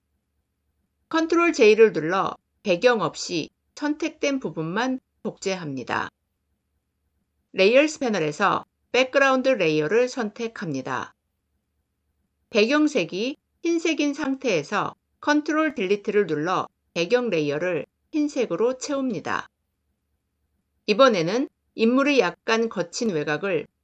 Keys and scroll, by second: 1.0 ctrl+j, 15.2 ctrl+BackSpace.